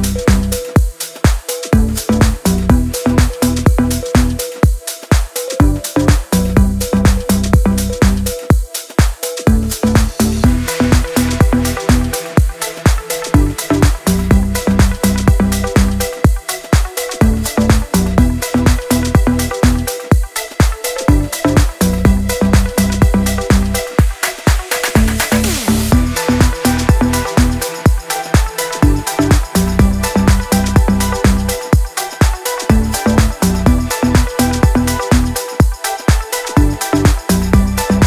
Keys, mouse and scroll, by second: 1.4-2.4 drag, 3.8-4.1 shift+click, 9.4 click, 13.7 click, 20.4 click, 29.0 click, 34.1 click, 35.2-36.8 drag, 37.8-38.0 drag.